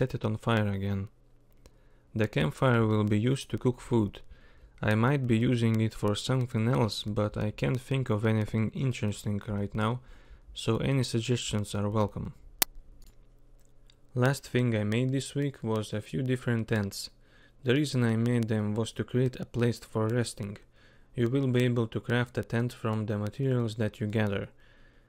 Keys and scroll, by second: 2.7 k, 4.1 k, 4.7 k.